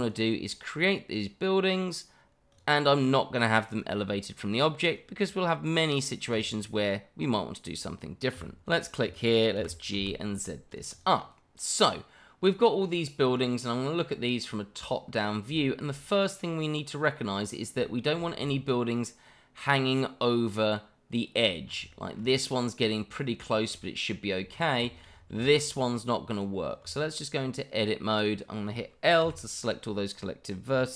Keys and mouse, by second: 0.0-6.8 drag, 8.6 click, 9.6 g, 9.9 z, 10.9 click, 11.2-12.4 middle drag, 13.2 click, 14.8 click, 15.6 shift+middle drag, 16.9 click, 17.9 shift+middle click, 18.5-21.4 shift+middle drag, 21.9 shift+middle drag, 23.7 shift+middle click, 24.8 shift+middle drag, 25.4 shift+middle click, 26.3 click, 26.8 Tab, 28.2 click, 29.2 l.